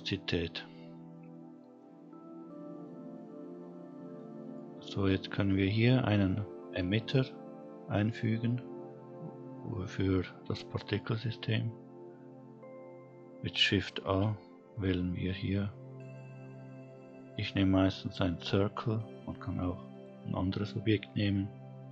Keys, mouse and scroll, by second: 0.0 middle click, 2.6 scroll down 1, 2.8-3.2 middle drag, 3.4-4.3 scroll up 2, 4.3-5.9 scroll down 1, 12.7 shift+a, 20.8-21.9 scroll down 2.